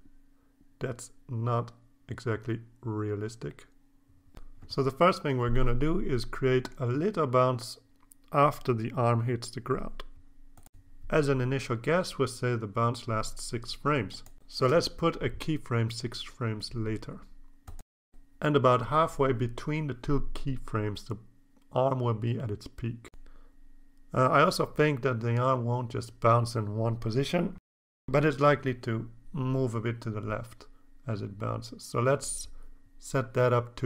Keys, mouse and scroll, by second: 4.6-4.9 scroll down 1, 5.4 click, 7.9-12.8 drag, 15.8 click, 17.2 click, 17.9 click, 19.1 click, 20.1-21.7 drag, 23.0-26.6 drag, 27.5-28.9 drag, 29.9-33.8 drag.